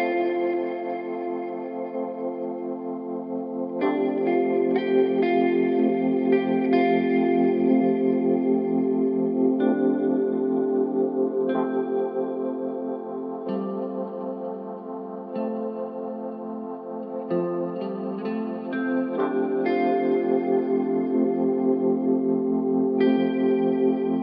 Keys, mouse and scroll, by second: 2.9-7.5 drag, 7.5-8.5 scroll up 1, 8.5-11.6 drag, 12.3-13.2 scroll down 1, 13.2-16.2 drag, 17.1-20.3 drag.